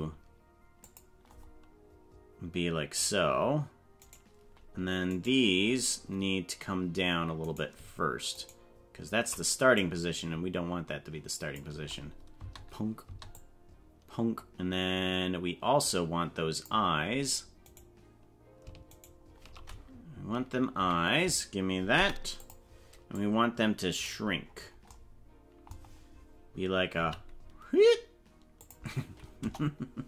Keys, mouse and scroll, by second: 4.0 right click, 5.1 right click, 8.1 right click, 8.8 shift+right click, 9.7-11.7 drag, 12.3 space, 13.1 space, 13.3-16.7 drag, 18.1 right click, 19.3 shift+right click, 23.1 click, 23.4 click, 24.3-24.7 scroll down 8, 27.0 s, 29.4 KP_0.